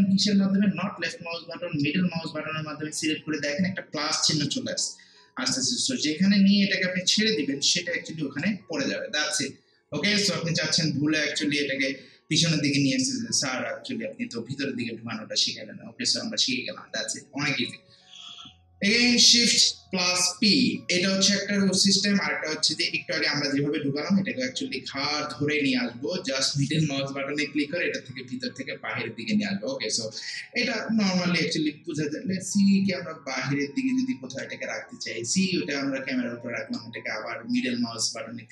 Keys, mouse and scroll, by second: 1.8-14.9 middle drag, 25.6-31.1 middle drag, 31.5-38.5 middle drag.